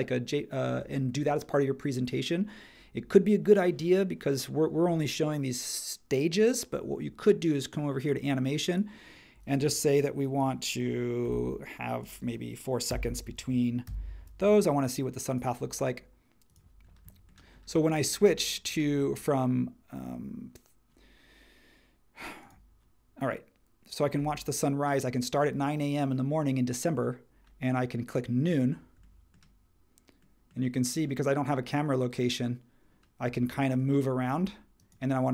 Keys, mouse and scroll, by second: 11.2 2, 12.9 4, 13.8 Tab.